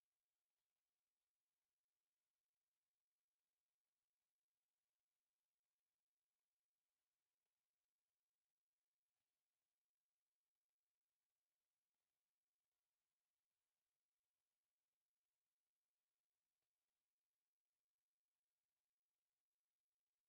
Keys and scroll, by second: 1.8 Escape, 2.0-6.1 typing, 2.5 Escape, 3.1 Escape, 4.2 Escape, 6.5 Escape, 7.4-10.9 typing, 7.7 Escape, 8.8 Escape, 10.0 Escape, 10.6 Escape, 12.0 m, 12.3 space, 12.6 Escape, 12.8 f, 12.9 space, 14.6-16.9 typing, 15.0 Escape, 16.0 Escape, 17.8 Escape, 18.2-20.2 typing.